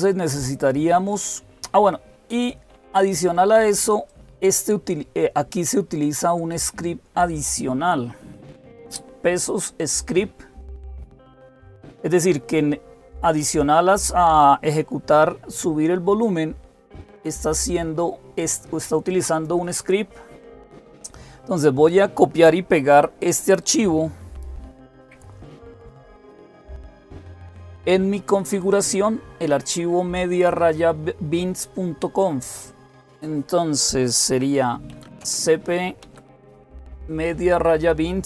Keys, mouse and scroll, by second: 3.9-7.2 drag, 11.6 click, 16.8-20.0 drag, 25.6-26.5 typing, 26.5 Return, 34.5-36.7 typing.